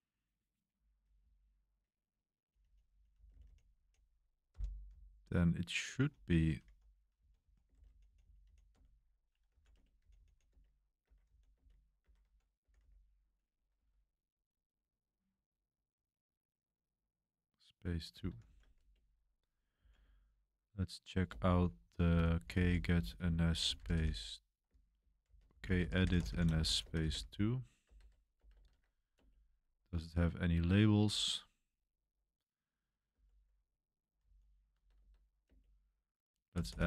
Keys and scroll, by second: 1.1-13.7 typing, 18.2-20.4 typing, 21.2 Return, 21.8-28.6 typing, 28.7 Tab, 29.1 Return, 30.0-31.2 typing, 33.1 o, 34.2 k, 34.7 BackSpace, 34.9 BackSpace, 35.4 Return, 36.5-36.8 typing.